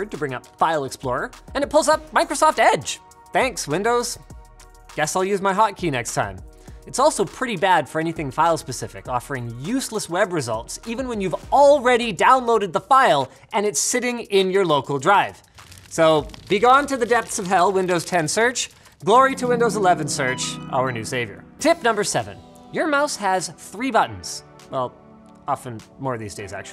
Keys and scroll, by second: 8.9-11.7 typing.